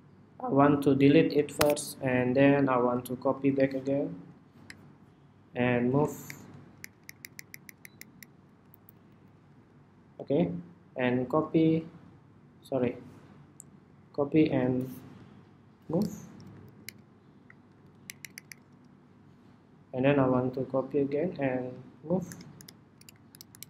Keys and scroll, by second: 2.8 super+c, 3.2 super+v, 11.3 super+x, 13.8 super+c, 14.2 super+v, 20.3 super+c, 20.8 super+v, 22.1 super+v.